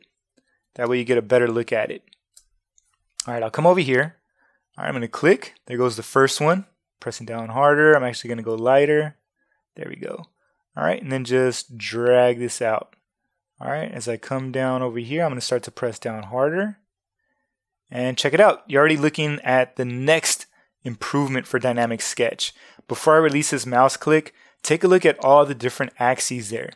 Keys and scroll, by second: 0.6 super+space.